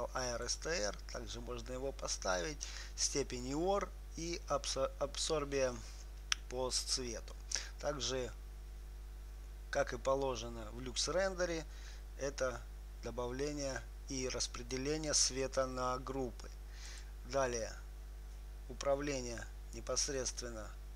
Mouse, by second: 17.2-19.1 drag, 20.6-20.9 drag.